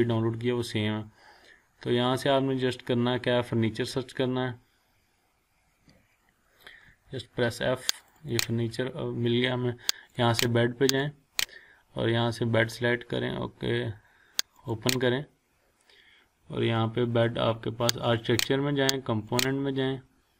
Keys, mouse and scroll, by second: 1.4-1.7 scroll down 1, 6.9 f, 8.0 click, 14.5 click, 18.1 click.